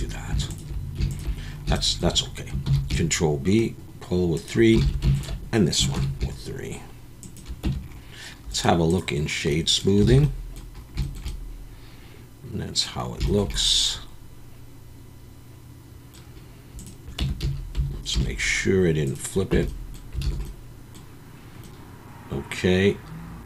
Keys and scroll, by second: 2.6 ctrl+b, 4.8 alt+a, 5.9 ctrl+b, 7.6 Tab, 10.1 alt+a, 17.2 Tab, 17.4 a, 18.1 alt+n, 19.5 Tab, 20.2 alt+a.